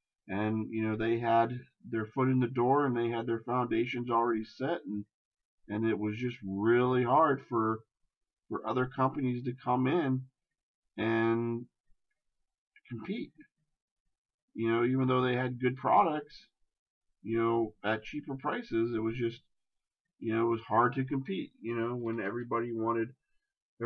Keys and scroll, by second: 0.6 shift+space, 7.4 ctrl+z.